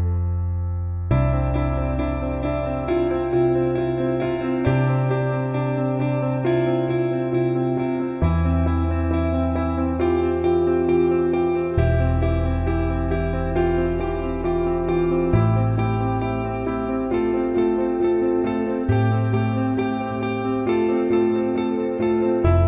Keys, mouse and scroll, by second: 9.9 alt+middle click, 11.7-12.7 drag, 13.4-13.8 alt+middle drag, 14.0-14.3 ctrl+alt+middle drag, 15.7 click, 18.2 click, 18.9 click, 19.4 click, 21.3 click.